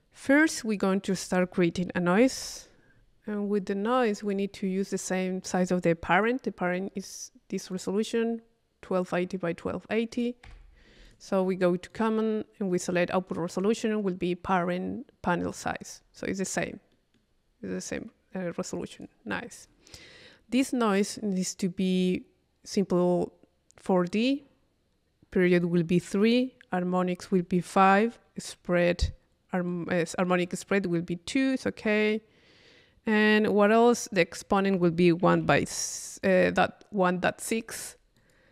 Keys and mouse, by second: 0.7 click, 1.1 Tab, 2.4 i, 3.9 click, 4.6-5.7 middle drag, 5.7 click, 7.0 u, 7.7 click, 10.1 click, 10.7 i, 11.1 click, 11.9 click, 13.5 click, 15.5 click, 16.9 middle click, 19.0-20.6 drag, 21.9 click, 24.1 click, 25.3-30.1 drag, 34.4-38.3 drag.